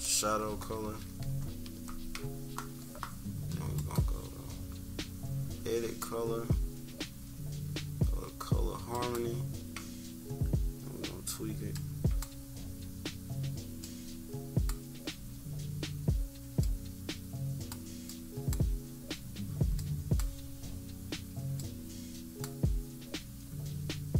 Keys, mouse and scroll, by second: 0.8 =, 1.0 =, 1.3 scroll down 2, 3.7-5.5 drag, 8.8 click, 11.6-14.6 drag, 16.5 click, 18.0 click, 19.7 click.